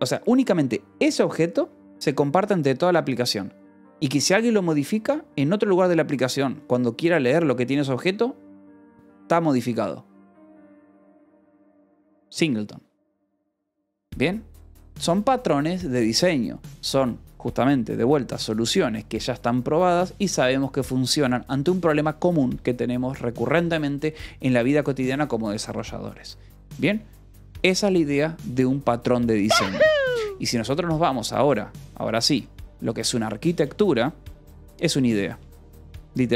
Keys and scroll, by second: 33.1 o, 33.6 -, 33.8 space, 35.4-36.3 typing.